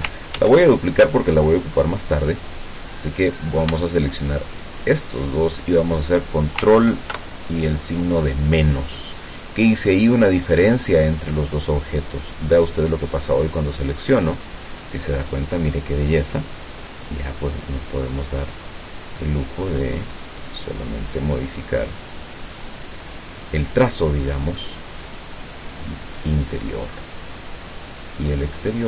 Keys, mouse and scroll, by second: 0.4 ctrl+d, 0.9 ctrl+click, 2.7 click, 4.9 shift+click, 7.2 ctrl+KP_Subtract, 13.1 click, 18.7-23.4 drag, 27.4-28.8 drag.